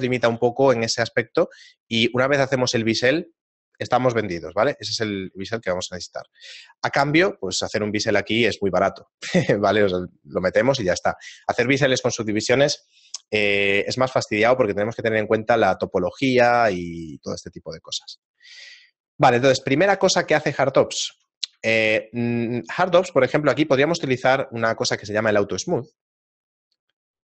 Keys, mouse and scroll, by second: 0.4 a, 1.0 middle click, 1.6 shift+middle click, 5.7 shift+middle click, 9.4 shift+middle click, 10.9 shift+middle click, 17.4 shift+middle click, 18.2 right click, 18.6 shift+middle click, 20.1 middle click, 20.7 shift+middle click, 21.8 shift+middle click, 23.1 right click, 24.8 click, 26.2 click.